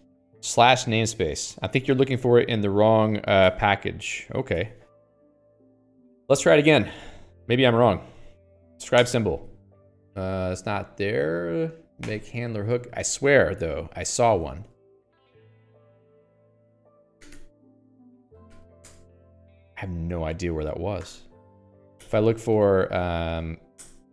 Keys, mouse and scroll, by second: 3.9 Escape, 4.9 click, 4.9 Escape, 5.1 Escape, 5.5-7.3 typing, 7.4 alt+x, 8.8 ctrl+j, 9.0 ctrl+j, 9.5 Return, 12.5 0, 13.1 Escape, 13.3 Escape, 13.7 alt+x, 14.0 Escape, 14.3 k, 14.5 k, 15.1 alt+x, 15.9 Return, 16.1-18.7 typing, 18.3 Tab, 19.2 Return, 21.4 0, 21.9 Escape, 22.1 Escape, 23.0 ctrl+g, 23.4 alt+x.